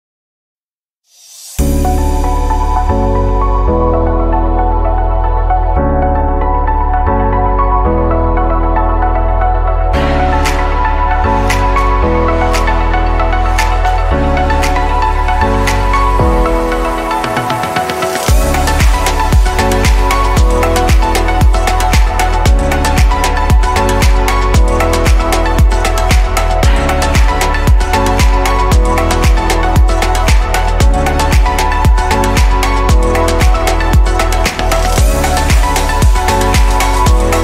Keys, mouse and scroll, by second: 0.5 alt+shift+click, 1.8 f, 4.3-4.8 drag, 5.7-8.0 middle drag, 8.0 click, 9.3 click, 9.9-12.7 middle drag, 12.7 click, 14.5 click, 16.6-19.8 middle drag, 20.4 click, 21.5-23.7 middle drag, 23.7 click, 25.6 click, 29.8-32.4 drag, 34.8-36.2 drag.